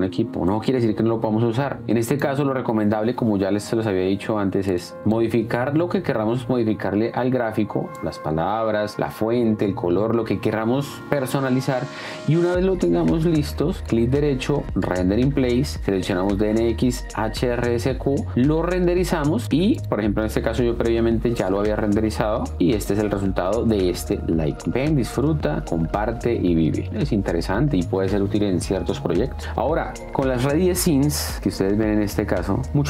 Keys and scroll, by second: 20.9 d, 24.2 space, 29.4 space.